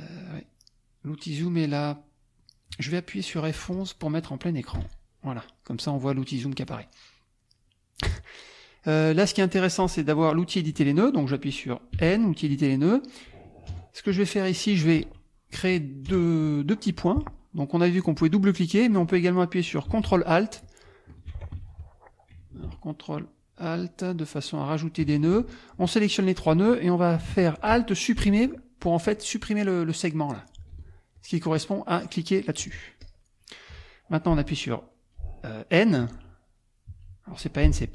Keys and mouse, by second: 0.3 click, 3.7 click, 4.8 F11, 7.0 click, 7.9 click, 11.9 n, 12.5 click, 13.7 KP_Add, 14.3 click, 16.1 KP_Add, 16.7 click, 18.1 click, 20.6 ctrl+alt+click, 21.6 ctrl+alt+z, 23.2 ctrl+alt+click, 24.6 ctrl+alt+click, 25.1 ctrl+alt+click, 25.7 click, 28.2 alt+Delete, 29.0 click, 30.8 ctrl+z, 31.1 ctrl+click, 32.6 click, 33.0 click, 36.0 n, 36.9 n.